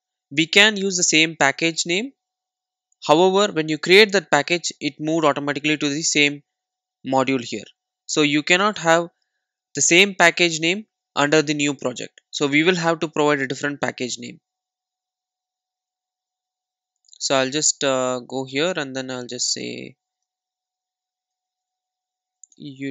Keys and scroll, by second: 14.2 super+z.